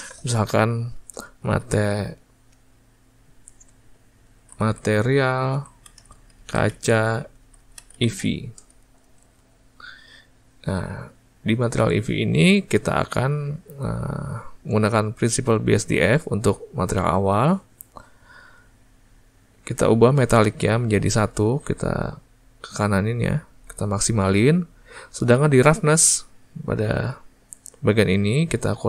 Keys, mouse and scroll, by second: 8.7 e, 22.1-28.8 drag.